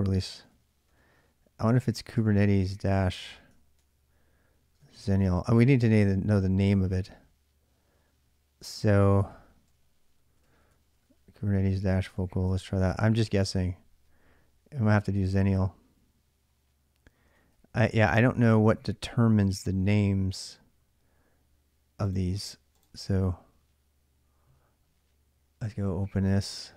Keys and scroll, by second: 0.3 ctrl+[, 0.5 k, 0.7 k, 2.0 Return, 3.1-6.0 typing, 3.4 ctrl+[, 8.7-13.1 typing, 13.3 Return, 17.2 ctrl+a, 17.3 ctrl+a, 17.3 typing.